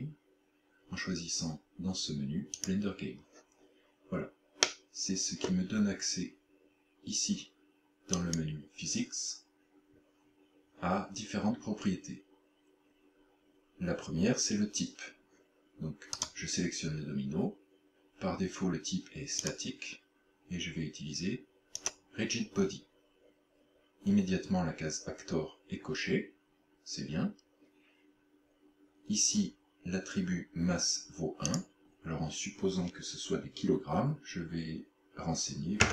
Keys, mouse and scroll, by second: 4.7 middle click, 8.2 click, 16.2 right click, 19.5 click, 31.5 click.